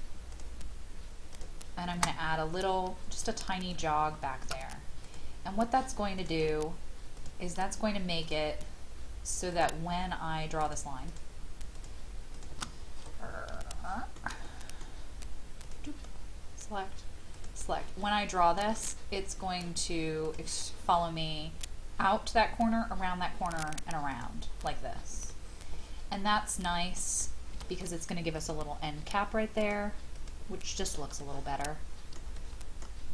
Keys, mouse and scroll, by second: 3.7 shift+click, 5.0-7.6 drag, 8.2 shift+click, 9.5 shift+click, 10.6 shift+click, 11.1 shift+click, 11.7 shift+click, 12.3 shift+click, 12.7-13.6 scroll down 1, 13.7 shift+middle click, 14.4 middle click, 15.6 shift+click, 17.3 shift+click, 18.0 shift+middle click, 20.2 click, 25.3-27.5 middle drag, 27.5 e, 28.3 shift+click, 29.5 shift+click, 30.1 shift+click, 30.7 shift+click, 31.2-33.1 middle drag.